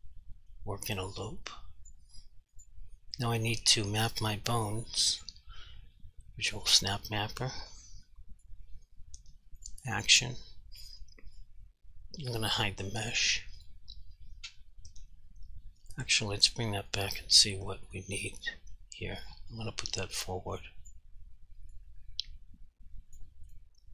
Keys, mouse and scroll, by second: 2.6 click, 5.2 click, 8.2 click, 9.6 click, 13.6 click, 16.9 click, 20.9 click.